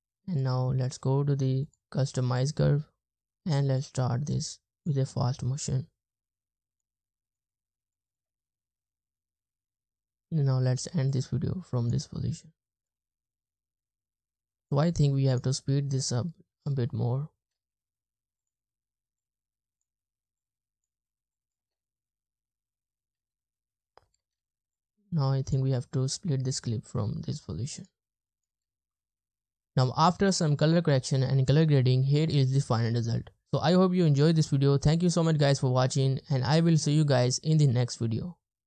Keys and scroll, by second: 8.2 space, 8.9 space, 13.0 space, 14.5 space, 14.8 space, 15.1 space, 16.2 space, 16.6 space, 17.2 space, 17.4 space, 21.6 space, 23.2 space, 24.1 space, 24.2 space, 28.5 space.